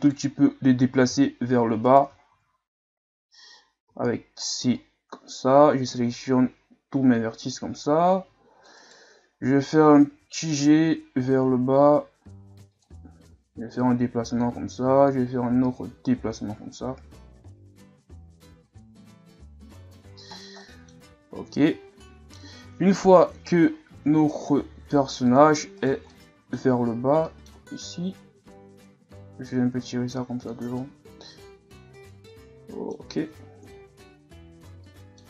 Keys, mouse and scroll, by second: 0.0 right click, 1.1 v, 2.3 ctrl+z, 3.9 c, 10.2 g, 13.7-18.1 drag, 20.1 z, 20.3 scroll down 3, 20.6 middle click, 21.0 Tab, 21.3 a, 21.7 a, 22.0-23.0 middle drag, 23.0 KP_1, 23.7 scroll up 2, 24.0 Tab, 25.8 right click, 26.1 middle click, 27.0 scroll down 2, 27.3 middle click, 27.9 click, 30.8-33.6 middle drag, 33.6 KP_1, 34.8 middle click.